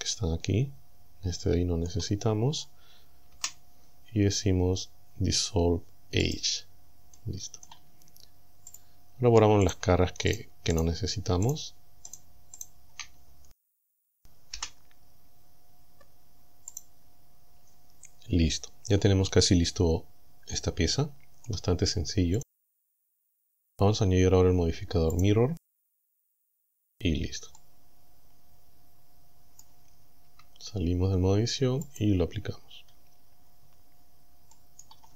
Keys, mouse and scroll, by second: 0.0-2.1 middle drag, 3.4 Delete, 6.3 click, 7.2 click, 8.7 click, 9.7 shift+right click, 10.4 shift+right click, 10.8 shift+right click, 11.5 shift+right click, 12.1 shift+right click, 12.6 shift+right click, 14.6 Delete, 16.8 click, 20.1 scroll down 1, 20.6-21.7 middle drag, 22.4 click, 25.2 click, 26.5 click, 27.2-27.5 scroll down 1, 27.7-29.8 middle drag, 30.4 Tab, 31.9 click, 32.7 scroll up 2, 33.6 scroll up 2, 33.7-34.2 scroll down 4, 34.6 middle click.